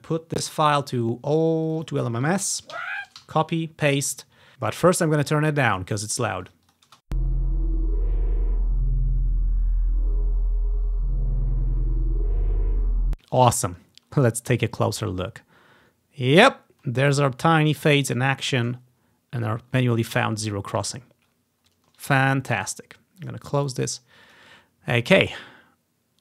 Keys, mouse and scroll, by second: 2.7 ctrl+c, 2.9 Right, 3.3 ctrl+v, 4.6-5.9 drag, 6.6-9.1 drag, 7.0 space, 13.4-13.7 scroll up 1, 15.7-16.3 scroll up 1, 16.3 scroll up 1, 16.5-16.9 scroll down 1, 19.0-20.1 scroll up 3, 20.1 scroll down 2, 21.1-21.9 scroll down 3, 23.3-25.2 drag, 25.4-26.2 drag.